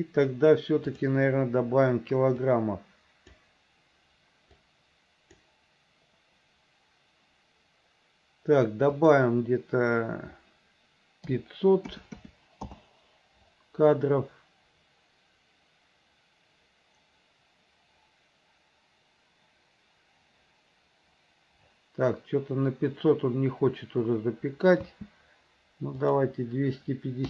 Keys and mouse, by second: 1.1 click, 2.6 click, 4.8 click, 9.1-12.8 drag, 12.3 KP_0, 25.0 space, 26.2-27.2 drag.